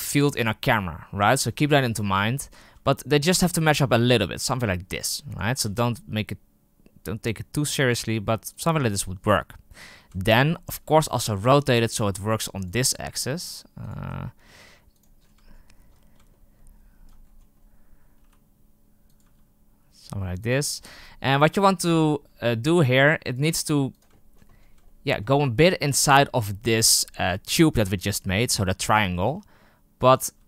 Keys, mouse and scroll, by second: 1.2-2.4 scroll up 12, 2.4 r, 4.5 g, 5.4 r, 10.1-10.7 shift+middle drag, 10.7 r, 11.8 g, 13.3 r, 13.9 g, 15.1 scroll down 5, 15.4-17.0 shift+middle drag, 17.0 scroll down 1, 17.1-18.1 scroll up 7, 18.1 r, 19.1 g, 20.6-20.9 scroll down 1, 20.9-22.4 shift+middle drag, 22.4 scroll up 1, 22.7 r, 23.4 g, 24.1-24.4 shift+middle drag, 24.4-24.8 scroll up 5, 24.8-25.1 shift+middle drag, 25.1-27.5 scroll up 1, 27.5-29.2 scroll up 1, 29.2 r, 30.2 g.